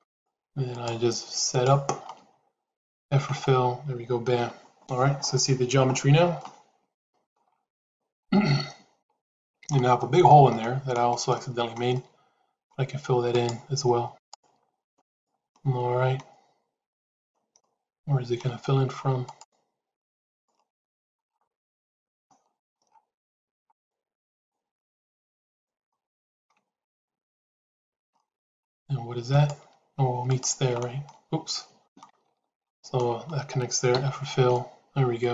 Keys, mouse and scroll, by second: 0.6 shift+click, 3.0 f, 5.8 shift+z, 6.2 middle click, 7.7-9.6 middle drag, 9.8 shift+middle click, 10.4 middle click, 11.3 shift+middle click, 11.9 middle click, 13.2 shift+click, 14.9 shift+click, 15.4-17.1 middle drag, 17.4 middle click, 19.1 click, 20.1 click, 20.5 middle click, 21.5-22.5 middle drag, 23.6 shift+click, 25.3 shift+click, 25.8 middle click, 26.7 shift+click, 27.5 shift+click, 28.0 middle click, 29.2 shift+click, 30.1 shift+click, 30.6 shift+middle click, 31.8 ctrl+z, 32.2 ctrl+z, 33.9 f, 34.4-35.3 middle drag.